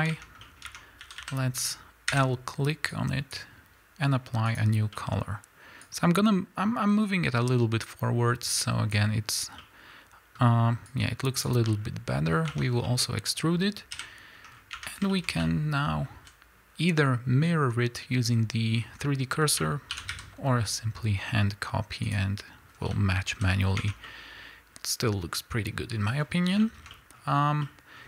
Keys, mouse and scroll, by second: 0.1 Tab, 0.5 middle click, 0.7 Tab, 1.0 a, 2.1 l, 2.9-5.0 drag, 5.0 middle click, 5.8-9.6 drag, 9.6-10.9 middle drag, 10.9 click, 11.7-22.1 middle drag, 12.5 Tab, 12.7 scroll down 1, 13.9 KP_1, 14.5 scroll up 2, 14.8 Tab, 16.3 z, 19.0-19.9 scroll up 1, 19.9 shift+d, 22.1 click, 22.7 scroll down 1, 23.4 z, 23.7 scroll down 1, 23.8 Tab, 24.1-27.6 middle drag, 26.2 scroll down 1.